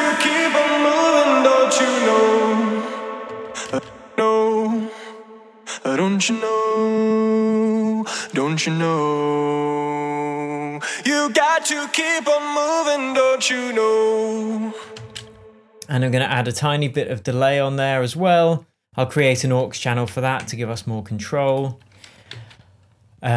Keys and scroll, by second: 3.7 space, 15.3 space, 19.9 shift+Tab, 21.7 Tab, 22.7 alt+super+t.